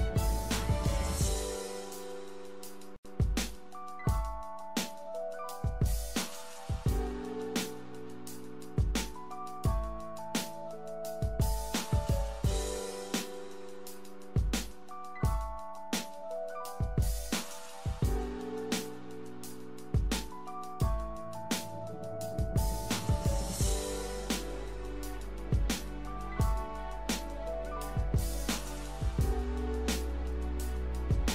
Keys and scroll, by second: 11.7 l.